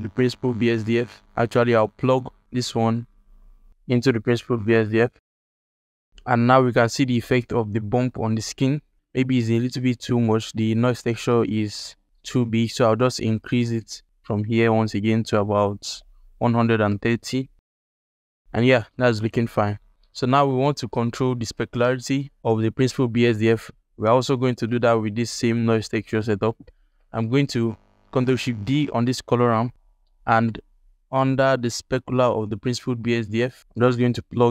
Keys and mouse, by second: 0.7 alt+shift+click, 2.3 click, 2.6-3.9 drag, 5.0 alt+shift+click, 10.1 alt+shift+click, 10.9 alt+shift+click, 11.7 ctrl+alt+click, 13.3-16.8 drag, 19.9 click, 24.6-26.2 drag, 27.0 alt+shift+click, 27.4 alt+click, 28.4 ctrl+shift+d, 29.8 ctrl+alt+click, 30.5 ctrl+alt+click, 31.0 alt+shift+click, 31.4 ctrl+alt+click, 33.0 alt+shift+click, 33.4 ctrl+alt+click, 34.3 click.